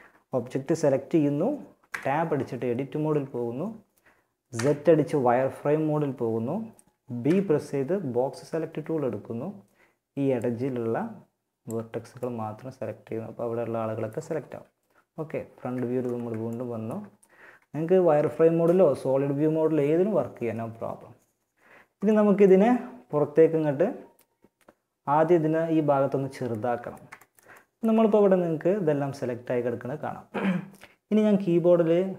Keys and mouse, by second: 1.1 Tab, 3.7 z, 6.4 b, 11.6 middle click, 13.0 middle click, 13.9 KP_1, 14.7 z, 16.5 z, 17.3 z, 25.9-26.9 middle drag.